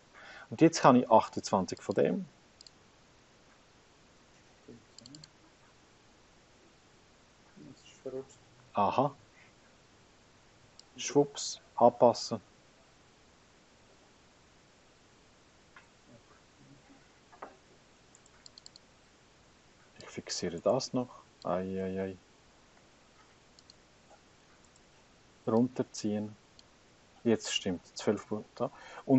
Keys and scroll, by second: 18.1 Escape, 22.1 F4, 22.7 Return.